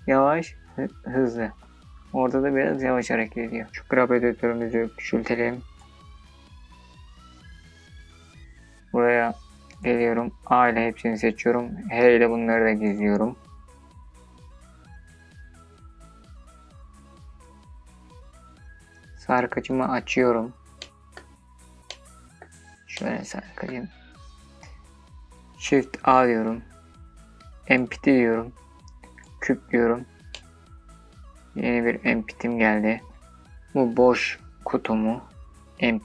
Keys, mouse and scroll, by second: 0.1 drag, 0.5-3.5 drag, 3.5 space, 4.3-7.3 drag, 7.9 click, 8.6 a, 10.2 h, 19.0 click, 19.9-20.3 middle drag, 20.5-21.0 scroll up 3, 21.0 middle click, 21.6 scroll down 2, 22.0 scroll up 1, 22.1 middle click, 25.0 shift+a, 29.4-31.2 middle drag.